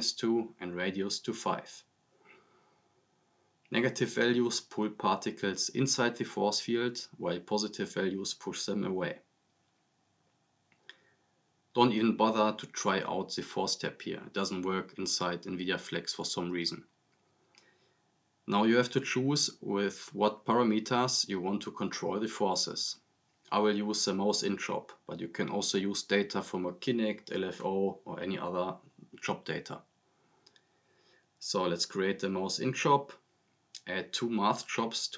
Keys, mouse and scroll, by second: 3.5 click, 6.4 click, 14.5 click, 18.9 scroll down 1, 21.1-22.3 drag, 26.2-27.8 typing, 29.5 click, 30.5 scroll up 1, 30.7-31.1 click, 31.4 right click, 31.4-34.0 typing, 32.3 click, 33.1 right click, 33.8 click, 34.3 right click, 34.7 ctrl+c, 34.9 ctrl+v.